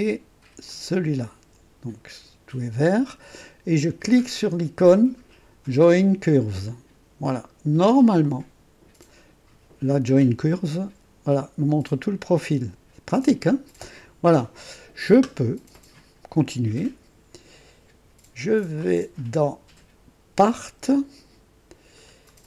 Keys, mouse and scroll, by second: 0.7 ctrl+click, 6.6 click, 8.2-9.0 drag, 18.7 click, 20.6 click, 22.2-22.4 scroll down 2.